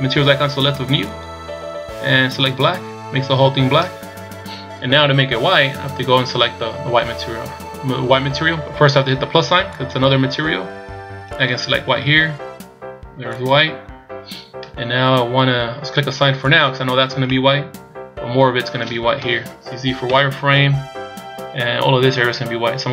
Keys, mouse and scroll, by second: 1.0 click, 9.8 click, 11.3 click, 16.4 click, 17.3 middle click, 19.2 KP_1, 20.1 z, 20.6 scroll up 1.